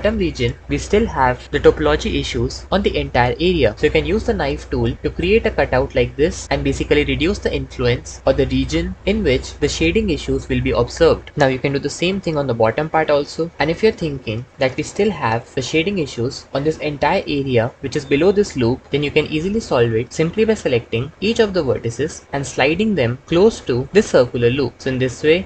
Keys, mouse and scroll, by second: 5.2 Tab, 12.4 Tab, 21.5 g, 21.8 g, 23.2 g, 24.4 g, 24.6 g.